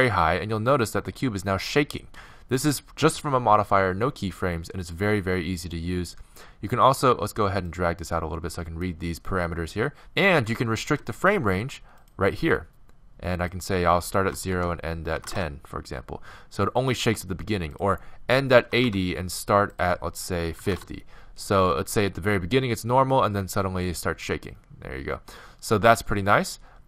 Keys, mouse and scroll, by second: 7.7-9.4 drag, 9.9-17.5 drag.